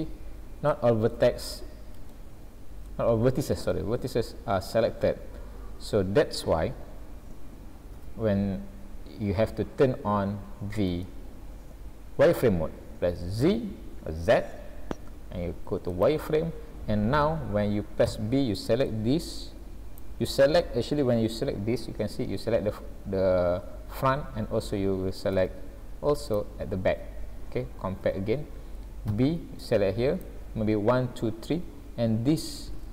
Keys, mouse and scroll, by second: 0.7 shift+middle click, 1.4-2.0 scroll up 2, 2.1 shift+middle click, 3.1 scroll down 1, 3.8 shift+middle click, 8.0 alt+a, 8.8-9.4 scroll down 3, 9.6-10.0 scroll up 2, 10.7 scroll up 1, 11.1 shift+middle click, 13.5 z, 18.2 b, 21.0-22.0 scroll up 2, 25.3 z, 28.1 alt+a, 29.1 b, 32.3-32.8 scroll up 2.